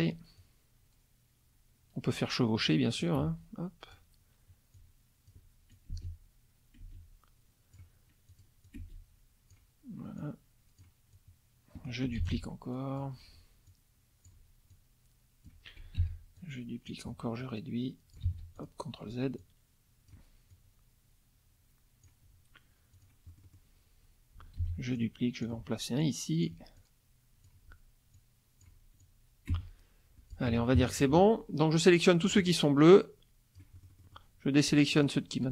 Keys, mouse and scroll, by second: 0.4-2.9 ctrl+drag, 3.0-4.2 drag, 3.2 space, 4.7 ctrl+click, 5.8-8.0 ctrl+drag, 5.9 space, 6.8 space, 8.3-9.7 drag, 8.8 space, 10.2-11.0 drag, 11.1 click, 12.2 ctrl+d, 12.3-13.2 ctrl+drag, 13.7-14.5 ctrl+drag, 14.7-15.7 ctrl+drag, 16.0 ctrl+d, 16.4-17.1 ctrl+drag, 17.4 ctrl+click, 18.3 ctrl+z, 18.6 ctrl+click, 19.4-20.3 ctrl+drag, 20.5-22.2 ctrl+drag, 22.9 click, 23.3 middle click, 24.6 ctrl+d, 25.0-25.6 ctrl+drag, 26.0-26.7 ctrl+drag, 26.8-27.7 ctrl+drag, 28.1 ctrl+click, 29.0-30.5 ctrl+drag, 29.5 space, 30.5 F1, 30.8 KP_Subtract, 32.3-33.7 drag, 33.8 middle click, 35.0 shift+click.